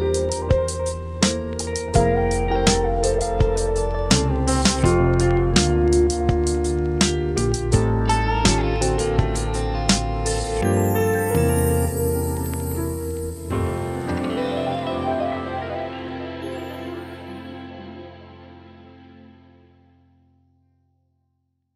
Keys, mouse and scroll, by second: 2.3-2.7 scroll up 5, 3.9 scroll down 3, 5.8-6.8 drag, 6.8 scroll down 2, 9.0-10.3 drag, 10.3-10.8 scroll up 2, 11.2 scroll up 1.